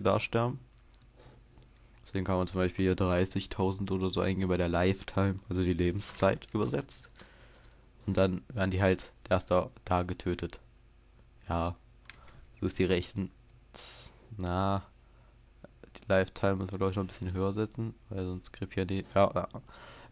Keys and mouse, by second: 12.9 KP_0, 14.1 middle click, 15.1-17.3 middle drag, 17.3-20.1 drag.